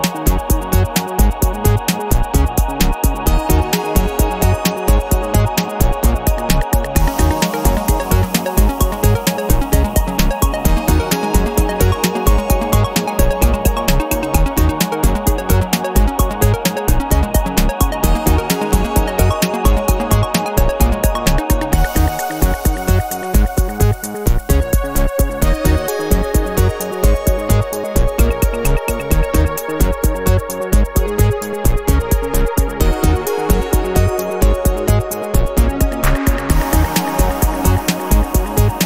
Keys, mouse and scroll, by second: 1.3 click, 2.7 click, 3.8 click, 5.3 click, 6.5 click, 7.6 0, 8.2-8.7 scroll down 1, 15.0 click, 17.0 click, 17.9 KP_1, 18.1 KP_0, 19.3 click, 20.1 KP_1, 20.3 KP_0, 21.6 click, 22.4 KP_2, 22.6 KP_0, 23.7-24.1 scroll down 2, 25.7 click, 27.1 click, 29.9 click, 30.9 click, 31.8 KP_1, 32.0 KP_0, 33.0 click, 33.8 KP_2, 34.0 KP_0, 35.2 click, 36.1 KP_1, 36.3 KP_0.